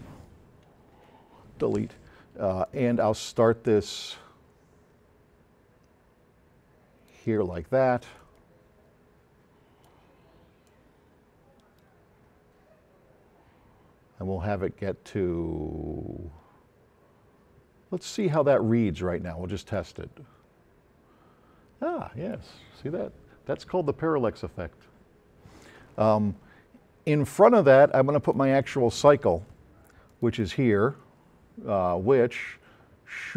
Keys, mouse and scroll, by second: 2.7-7.3 drag, 8.2-10.1 drag, 10.7-18.4 drag, 28.5-29.7 drag.